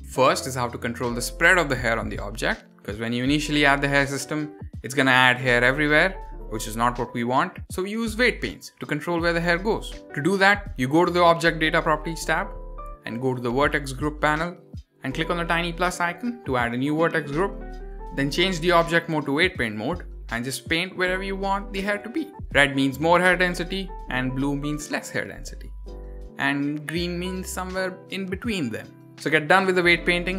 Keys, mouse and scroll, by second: 0.0 ctrl+z, 0.1 click, 1.2 click, 2.3-4.8 drag, 12.2 click, 14.7 click, 18.1-20.5 drag, 21.7 shift+middle click, 22.0-22.4 scroll up 2, 22.4 click, 24.7 scroll down 2, 25.0 click, 27.0 click, 28.9 click, 29.5 click.